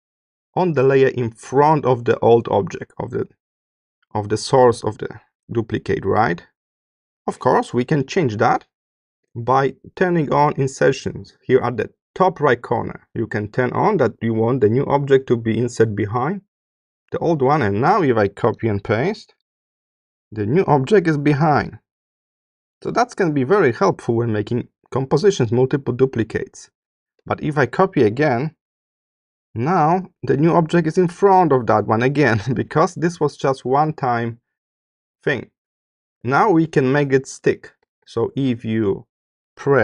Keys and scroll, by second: 7.9 BackSpace, 28.5 super+c, 36.2 BackSpace, 37.3 BackSpace.